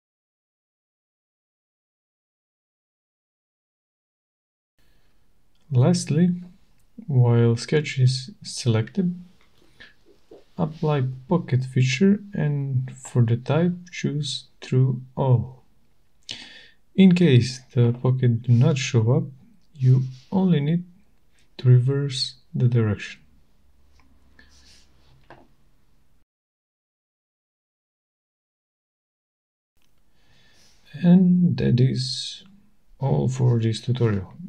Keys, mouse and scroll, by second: 1.8 click, 4.0 middle click, 8.9 click, 12.5 click, 13.8 click, 17.2-17.7 scroll, 18.2-18.8 scroll, 20.2-21.8 scroll, 20.3 click, 22.5 click, 23.1 click, 24.5 shift+right click, 28.4 click, 29.1 click, 30.2 middle click, 30.3-30.7 scroll, 30.9 right click, 31.2 middle click, 31.3 middle click, 31.6 middle click, 31.7-32.5 scroll, 32.8 scroll, 33.5 shift+right click, 34.1 shift+right click.